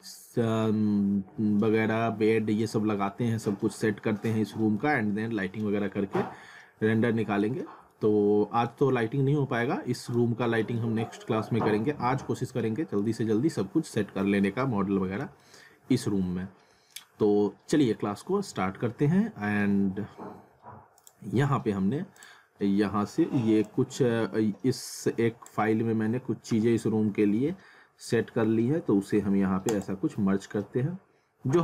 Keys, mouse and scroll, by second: 0.7 alt+middle click, 2.8 scroll down 1, 3.1 alt+middle click, 4.8-5.7 alt+scroll up 1, 5.7 scroll up 1, 6.1 alt+middle click, 7.6 scroll down 1, 7.9 alt+middle click, 10.8 alt+middle click, 14.4 alt+middle click, 15.4 alt+middle click, 16.2 scroll down 1, 16.9 alt+middle click, 21.0 click, 29.7 click.